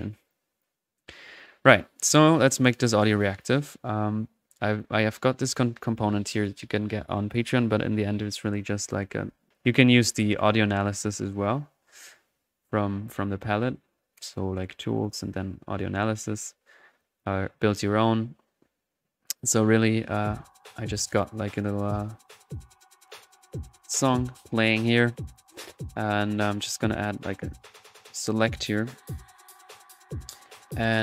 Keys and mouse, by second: 0.3-2.3 drag, 2.5 click, 3.1 middle click, 3.4 click, 4.7 drag, 5.4 click, 6.3 click, 10.1-11.4 drag, 15.0-18.4 drag, 19.8 click, 22.4 click, 23.9 click, 24.1-24.8 typing, 24.3-24.8 drag, 26.5-27.6 right drag, 27.3-28.1 typing, 27.8-29.1 drag, 28.6-30.6 middle drag.